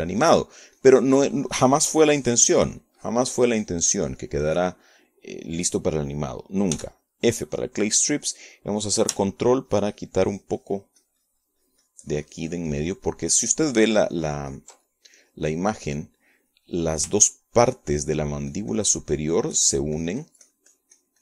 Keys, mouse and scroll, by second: 0.6-6.8 drag, 6.8 middle click, 8.7 f, 9.6 click, 11.2-16.8 ctrl+drag, 17.2 ctrl+middle click, 18.5 middle click, 19.2-21.2 ctrl+drag.